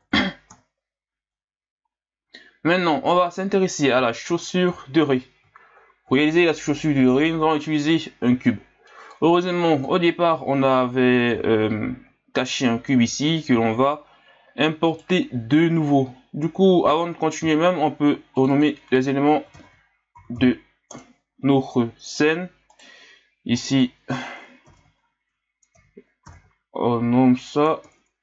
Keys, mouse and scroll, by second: 0.5 KP_1, 1.9-3.9 scroll down 5, 3.9 scroll down 2, 4.2 scroll up 9, 5.0-5.5 scroll down 2, 5.5-6.5 scroll up 5, 9.1-10.7 drag, 10.7-11.8 scroll down 1, 14.9 right click, 17.1-17.6 scroll up 1, 18.3 click, 18.5-21.5 drag, 22.7 right click, 23.6-26.7 drag, 27.9 Left.